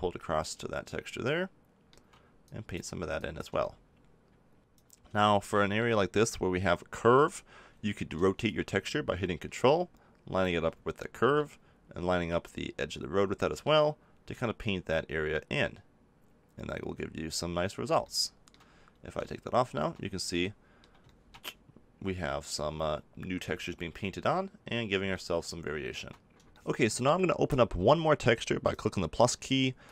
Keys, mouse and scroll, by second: 2.4-4.6 drag, 4.6 ctrl+z, 5.2 click, 5.9-8.4 middle drag, 8.4-10.3 drag, 11.3-14.3 middle drag, 14.3-18.0 drag, 18.0 middle click, 18.4 middle click, 19.3-22.9 middle drag, 25.1-26.5 middle drag, 28.6-29.9 drag.